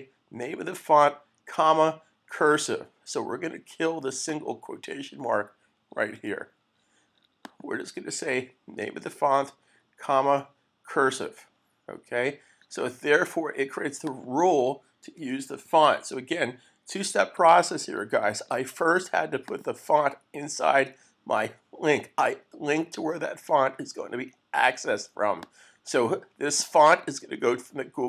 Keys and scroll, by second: 15.6 super+s.